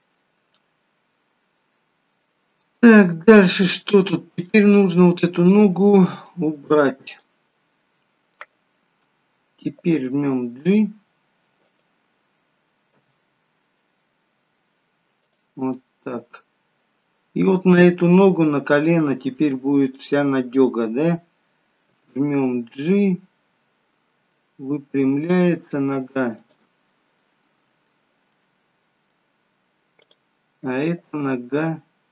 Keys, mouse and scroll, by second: 0.8-1.5 scroll up 1, 1.5 scroll down 1, 2.4 shift+middle click, 3.2 middle click, 4.5 middle click, 5.6 click, 6.0 middle click, 7.1 click, 7.5 middle click, 10.2 g, 15.7 middle click, 20.0 click, 22.0 g, 27.0 middle click, 28.5 middle click, 30.1 click, 31.3 g.